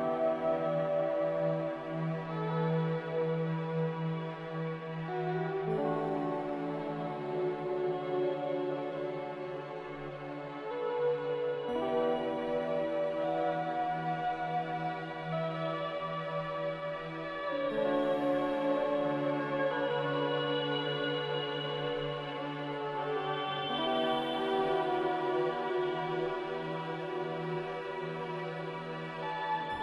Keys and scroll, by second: 8.2 ctrl+z, 23.7 a.